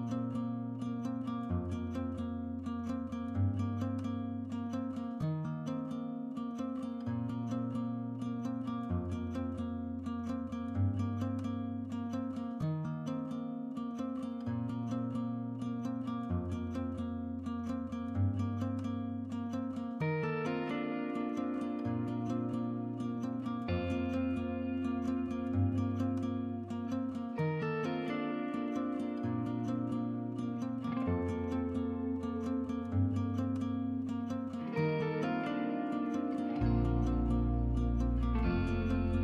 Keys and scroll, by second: 7.3 x, 21.3-23.0 typing.